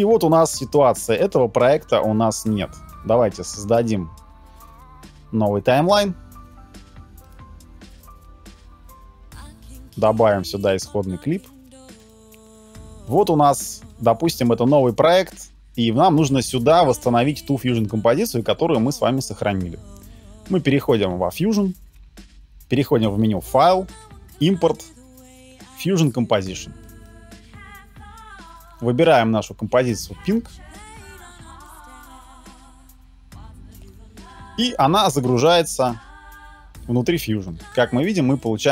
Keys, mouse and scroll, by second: 3.8 right click, 22.3 middle click, 34.7 middle click.